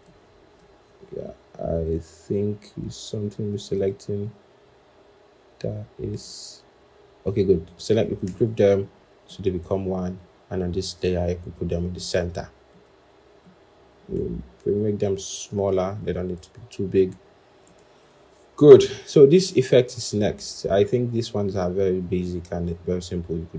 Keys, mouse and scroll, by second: 2.2 scroll up 1, 3.6 shift+click, 6.0 shift+click, 6.9-7.7 scroll down 1, 8.5 ctrl+g, 14.9 shift+click.